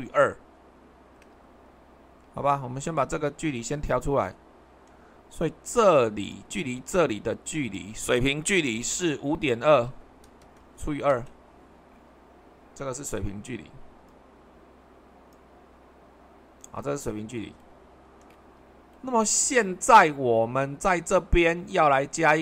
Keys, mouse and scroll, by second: 2.3 super+2, 10.3-10.7 typing, 11.1 Return, 12.6-13.9 middle drag, 12.6-13.9 scroll up 1, 14.0-16.3 drag.